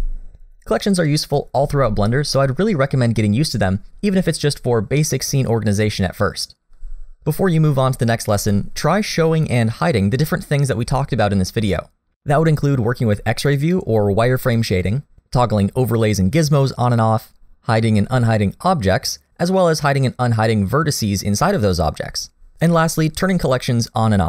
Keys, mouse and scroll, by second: 15.2 click.